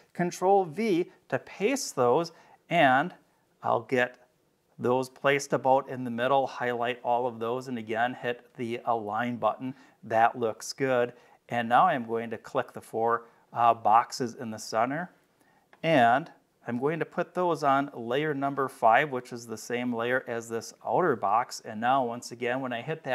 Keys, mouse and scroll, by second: 0.6 ctrl+v, 2.3-3.8 drag, 4.6-6.1 drag, 9.0 click, 10.9 click, 12.4 click, 17.8 click, 18.9 click.